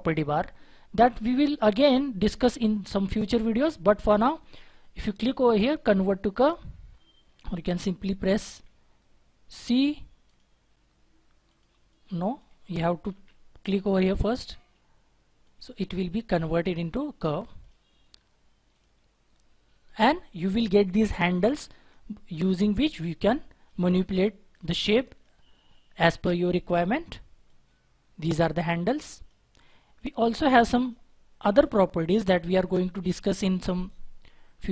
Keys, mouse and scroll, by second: 8.4 c, 11.8 double click, 12.8 double click, 13.1 ctrl+z.